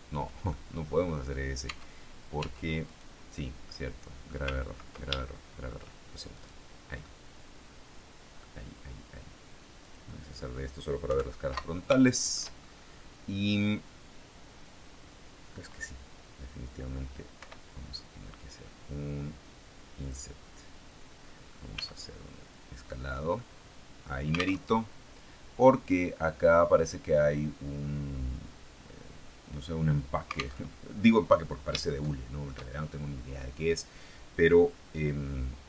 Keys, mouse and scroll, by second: 0.4 ctrl+middle click, 1.6 Tab, 2.3 Tab, 2.7 click, 2.9 right click, 3.5 middle click, 5.1 ctrl+shift+middle click, 6.3 right click, 6.9-8.5 middle drag, 9.7 click, 10.9 KP_3, 11.8 shift+middle click, 12.7-13.4 shift+scroll up 3, 13.4-14.0 scroll down 2, 17.3 i, 19.9 click, 21.6 s, 23.0 click, 23.5 middle click, 24.5 alt+Tab, 30.5 alt+Tab, 31.8 shift+middle click.